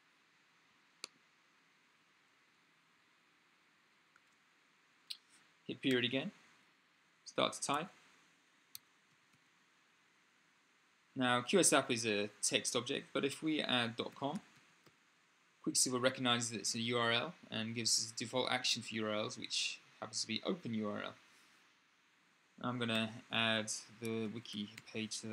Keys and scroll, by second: 5.6 ., 7.1-9.6 typing, 13.7-15.1 typing, 22.7-25.0 typing.